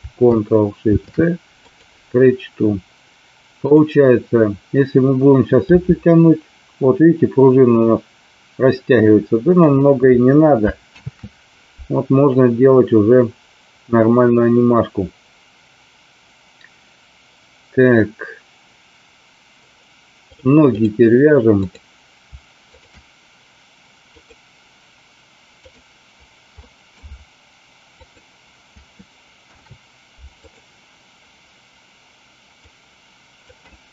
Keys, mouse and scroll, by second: 3.6 click, 5.6 g, 9.6 click, 11.1 ctrl+z, 20.3 click, 21.6 click, 24.1-25.8 drag, 26.5 middle click, 29.4 ctrl+p, 32.5 click.